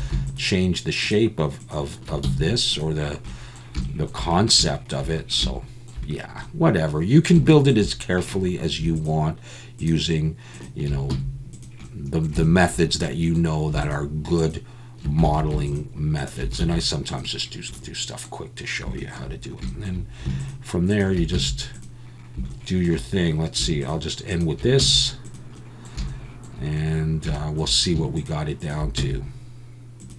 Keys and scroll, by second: 2.2 x, 11.1 x, 15.3 ctrl+z, 16.6 x, 21.3 x, 24.8 x, 29.0 x.